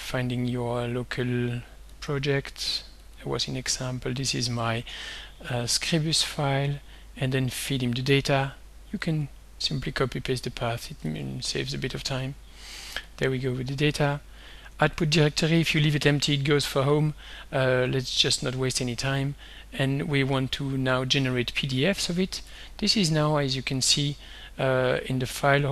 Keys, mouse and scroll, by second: 2.0 click, 3.1 click, 3.8 click, 6.3 click, 9.1-10.1 drag, 10.3 ctrl+c, 10.8 ctrl+click, 11.1 ctrl+v, 12.2 click, 13.2 click, 13.9 click, 15.1 click, 16.8 ctrl+v, 22.6 click, 23.8 click.